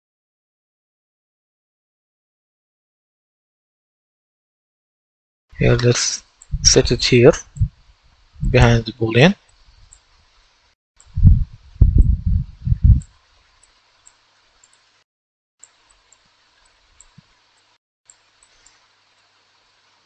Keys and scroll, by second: 0.0-1.0 typing, 1.0 Return.